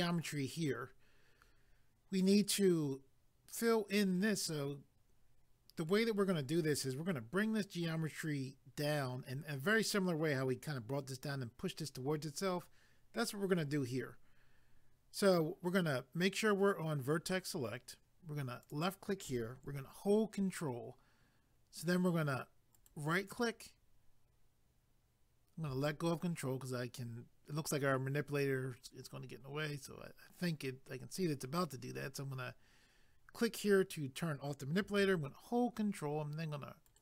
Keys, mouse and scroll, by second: 18.7 click, 22.7 ctrl+right click, 33.4 click, 36.9 ctrl+right click.